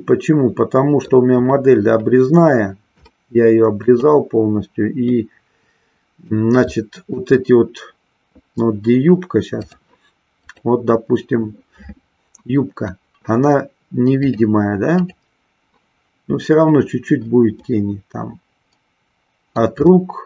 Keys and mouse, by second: 3.2-4.1 shift+middle drag, 5.4-6.5 middle drag, 6.7 middle click, 9.6 click, 10.2 click, 14.1-15.2 drag, 17.9-19.9 middle drag, 20.1-20.2 middle drag.